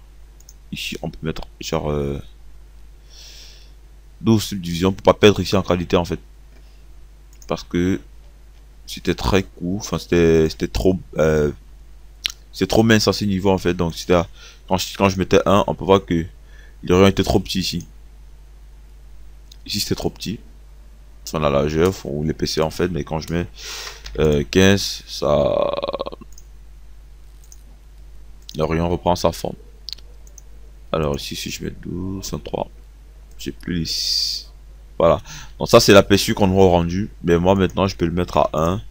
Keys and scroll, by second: 15.0 KP_1, 23.8 KP_1, 38.4 1.